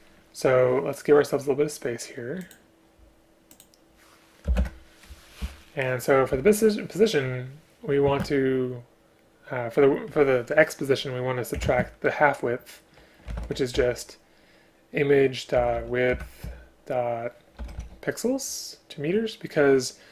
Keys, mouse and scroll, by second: 4.5 BackSpace, 4.6 Return, 5.4 Right, 6.0 Right, 8.1 space, 11.7 space, 16.2 Return.